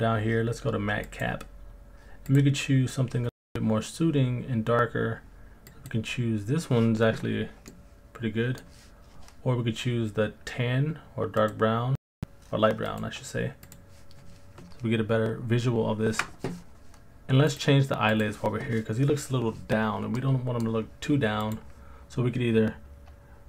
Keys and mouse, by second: 7.7 middle click, 11.5-13.9 drag, 17.5 click, 20.2-20.6 middle drag, 21.5-23.4 drag.